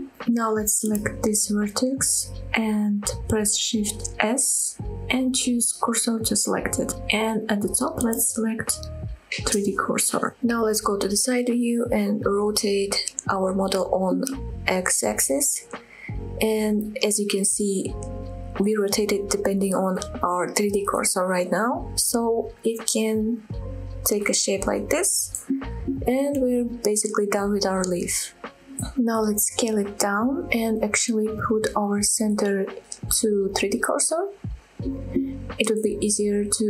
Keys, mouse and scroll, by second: 0.2 middle click, 2.1 click, 4.0 shift+s, 6.0 middle click, 7.7-9.6 drag, 11.1 KP_3, 11.6 scroll up 1, 13.0 r, 14.0-16.5 scroll down 8, 16.5 y, 18.3 x, 19.5-20.2 scroll down 2, 20.3-22.0 scroll down 4, 25.0 click, 25.3-25.6 scroll down 1, 25.6 middle click, 26.5 Tab, 26.9 click, 27.3 scroll down 1, 27.3-28.2 middle drag, 28.4-29.3 middle drag, 29.3 scroll down 2, 29.3 click, 30.0 s, 31.7 click, 32.4 middle click, 33.1-35.4 right drag, 35.4 click.